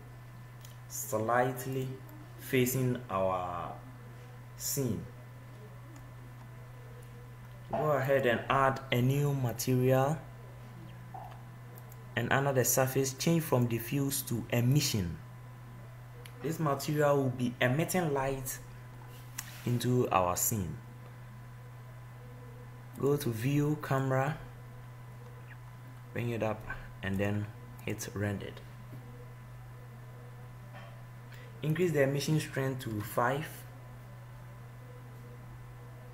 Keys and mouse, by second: 2.4 click, 8.2-11.6 drag, 12.1-15.8 drag, 35.4-36.1 drag.